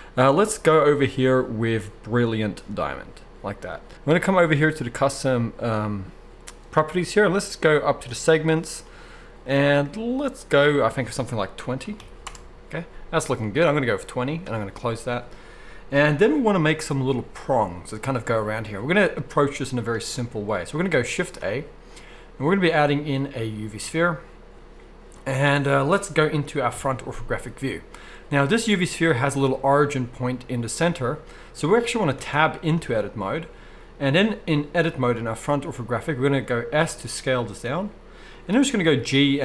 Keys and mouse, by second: 4.8-38.5 drag, 21.2 shift+a, 26.7 KP_1, 32.3 Tab, 32.8 z, 36.8 s, 38.5-39.4 middle drag, 38.8 g.